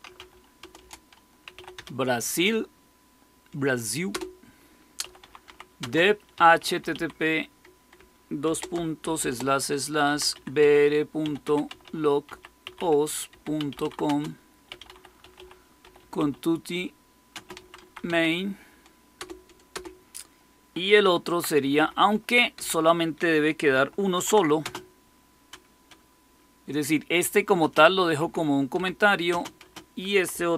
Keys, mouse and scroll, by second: 0.0-2.2 typing, 4.0-19.6 typing, 20.9-22.5 typing, 22.5 Left, 24.1-24.5 typing, 27.5 space, 28.1 Down, 28.7 Down, 29.2-30.5 typing.